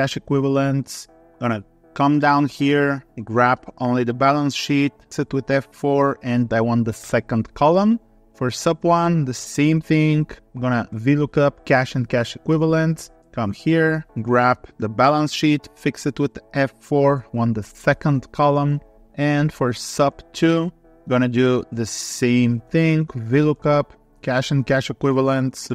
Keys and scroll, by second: 9.0 Tab, 23.1 Tab.